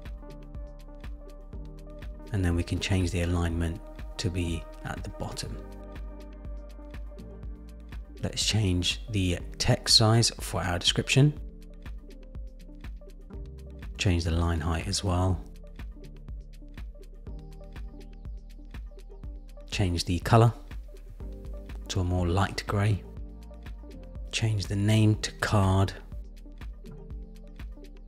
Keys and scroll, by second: 10.1 Down, 14.3 Down, 14.8 Down, 15.4 Down, 20.1 super+c, 20.9 super+v, 21.4 Return, 26.8 Return.